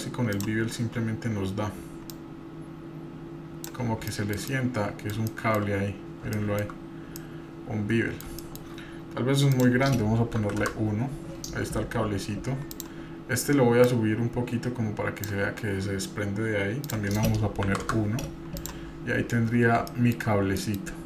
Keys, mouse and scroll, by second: 0.0 scroll down 2, 0.3 click, 0.7-1.6 scroll down 2, 1.6-2.2 scroll down 2, 2.1-3.8 drag, 4.1-5.1 shift+middle drag, 5.3-5.7 shift+middle drag, 5.8-6.3 scroll up 2, 6.3-6.7 shift+middle drag, 6.8-7.2 scroll up 1, 7.2-8.2 middle drag, 8.5 shift+middle click, 9.5-10.9 drag, 11.7 scroll down 1, 12.7 click, 13.8 click, 16.8-17.9 drag, 18.5-18.9 drag, 18.9-19.8 scroll down 5, 19.8-20.1 shift+middle drag, 20.6 middle click, 20.6 scroll up 1.